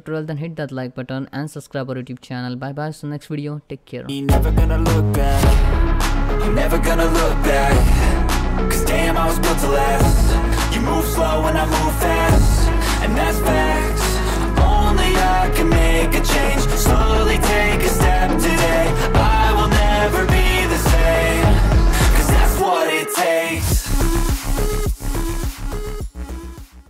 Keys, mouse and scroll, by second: 2.2 scroll down 1.